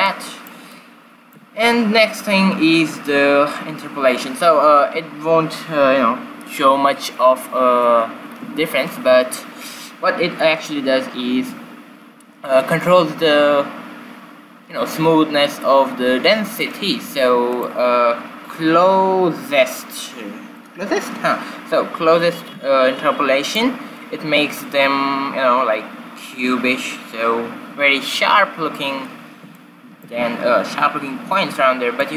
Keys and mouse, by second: 0.3-2.9 middle drag, 17.7-19.7 drag, 29.8-31.7 middle drag, 32.0-32.1 middle drag.